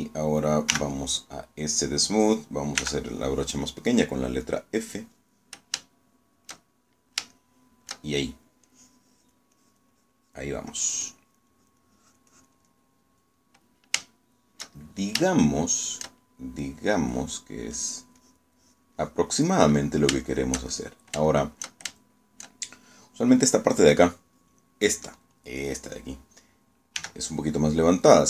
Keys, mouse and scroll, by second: 1.8 s, 3.9 f, 5.3-6.5 drag, 6.9 shift+middle click, 8.1 shift+middle click, 8.5 shift+middle click, 9.7 click, 10.7 click, 11.8-13.7 drag, 13.8 middle click, 15.1-16.3 shift+middle drag, 16.4 shift+middle click, 17.7 middle click, 18.9 click, 19.3-20.7 drag, 20.8 middle click, 21.4 shift+middle click, 22.1 shift+click, 23.0 shift+click, 28.1 g.